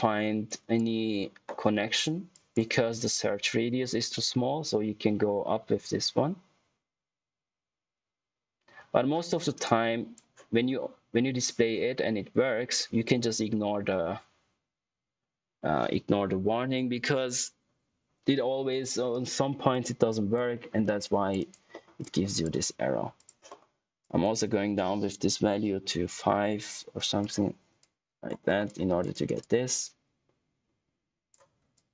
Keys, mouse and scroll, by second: 4.1 middle click, 9.6 click, 17.2 click, 19.0 click, 20.5 middle click, 20.8 click, 21.3 right click, 21.6 middle click, 21.9 click, 27.1 click, 28.4 scroll up 1, 28.6 click, 29.0 right click, 29.3 click, 31.5 scroll down 1, 31.7 click.